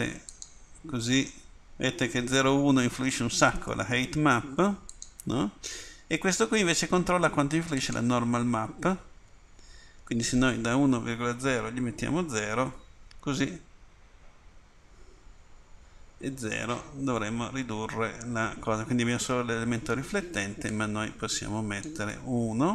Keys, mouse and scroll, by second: 0.0 middle click.